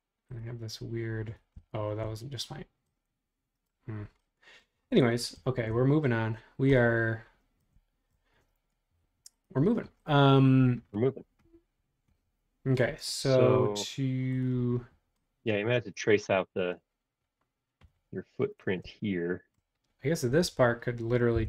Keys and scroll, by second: 21.3 '.